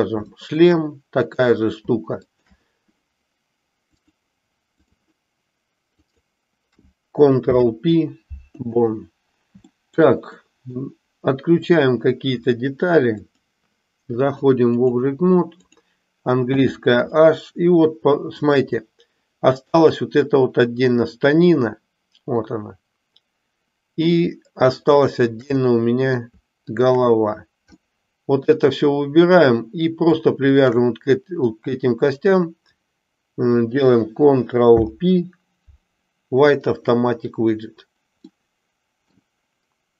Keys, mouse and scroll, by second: 0.4 shift+middle click, 1.3 click, 2.2 shift+click, 3.9-4.9 drag, 7.4 ctrl+p, 9.8 middle click, 10.4 middle click, 13.2 click, 14.3 click, 15.5 click, 16.5 h, 17.2-18.5 middle drag, 19.6 click, 25.5-26.3 middle drag, 26.6 shift+click, 27.8-28.5 middle drag, 30.4 shift+click, 34.6 ctrl+p, 38.4 middle click.